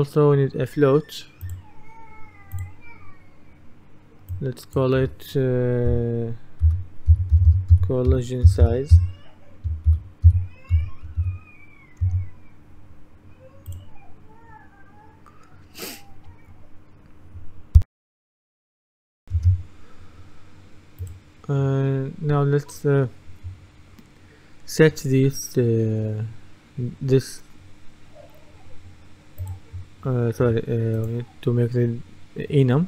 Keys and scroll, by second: 6.4-11.7 typing, 12.1 Return, 19.4 F10.